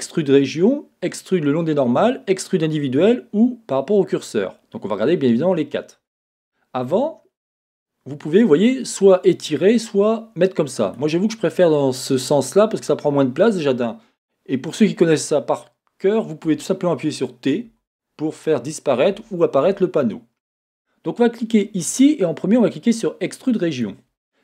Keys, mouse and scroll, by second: 16.5 typing, 17.7 t, 19.6 t.